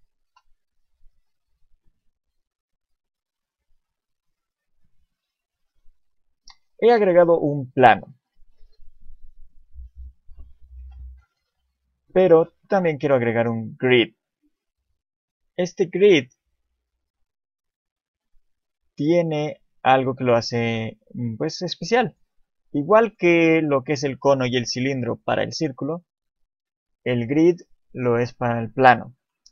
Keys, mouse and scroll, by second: 0.3 KP_7, 1.1 shift+a, 4.2 scroll down 2, 4.7 scroll up 1, 6.8 scroll up 1, 10.0 right click, 10.8 shift+a, 18.6 shift+middle click, 19.4-20.1 scroll up 1, 20.1 shift+middle click, 22.0 click, 23.0 click, 29.2 click.